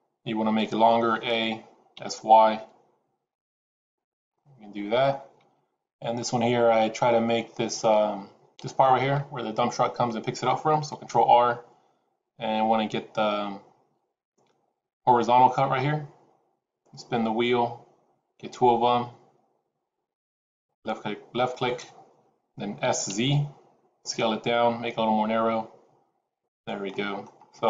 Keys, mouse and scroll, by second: 1.1 a, 1.8 s, 4.2 middle click, 10.8 ctrl+r, 22.8 s, 26.8 middle click, 27.3-27.6 scroll up 2.